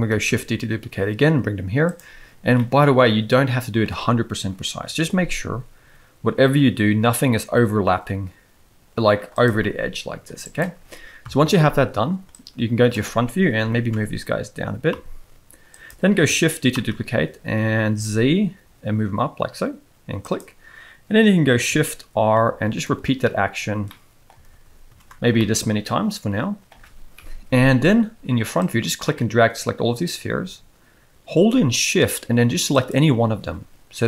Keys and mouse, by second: 0.1 shift+d, 2.6-3.8 middle drag, 4.7 KP_7, 9.3 click, 9.6 g, 11.2 KP_1, 12.3 click, 13.6 g, 16.7 shift+d, 22.3 shift+r, 22.6 shift+r, 22.8 shift+r, 23.0 shift+r, 23.8-24.2 middle drag, 24.5 shift+r, 24.8 shift+r, 25.4-26.6 middle drag, 27.1 KP_1, 28.6-30.0 drag, 32.8 shift+click.